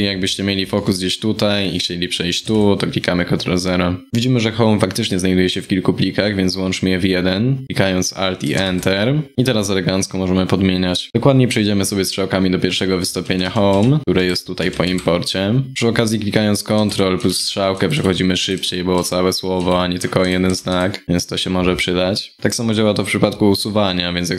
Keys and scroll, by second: 8.2 alt+Return, 13.8 ctrl+Right, 14.0 ctrl+Right, 14.0 ctrl+Right, 16.4 ctrl+Left, 16.8 ctrl+Right, 17.0 ctrl+Right, 17.4 ctrl+Right.